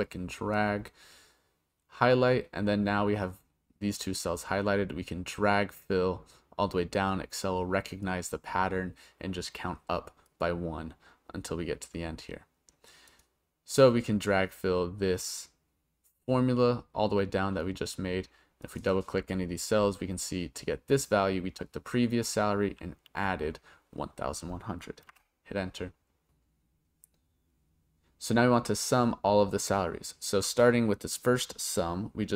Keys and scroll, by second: 25.1 Return.